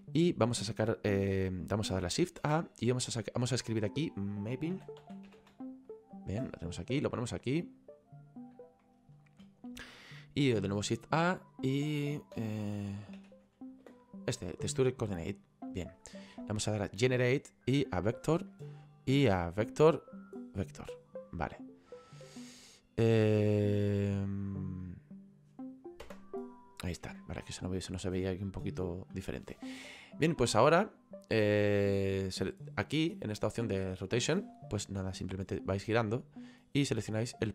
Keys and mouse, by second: 6.7 click, 8.9 shift+middle click, 13.9 space, 15.1 click, 17.1 click, 18.6 middle click, 20.2 click, 22.3 middle click, 24.9 middle click, 26.1 KP_0, 31.0 click, 35.2 click.